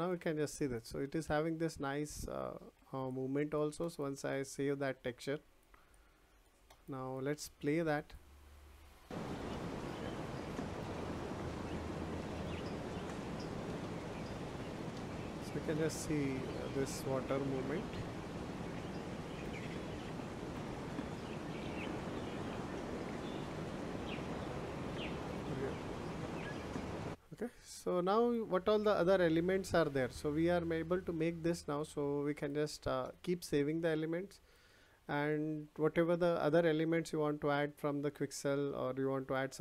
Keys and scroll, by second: 21.8 space.